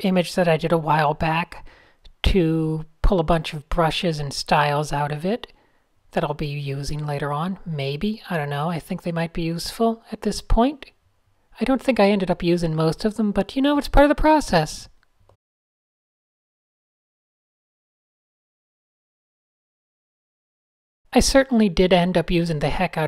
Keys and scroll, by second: 4.5-5.5 typing, 7.0 super+a, 7.5-10.1 typing, 8.4 super+a, 17.5-21.4 typing, 17.9 super+z, 19.6 super+z, 19.7 super+z, 20.1 ctrl+alt+shift+g.